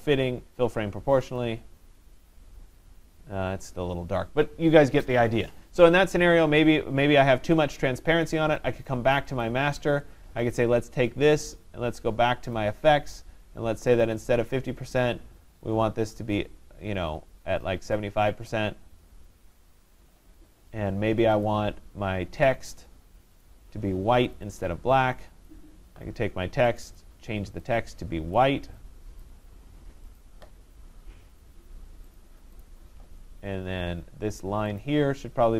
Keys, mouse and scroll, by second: 1.4 click, 9.2 click, 9.4 click, 10.6 click, 12.6 click, 21.5 click, 23.5 click, 24.4 click, 25.5 click, 26.8 click, 27.0 click, 28.4 click, 29.2 click, 32.7 click, 34.8 click.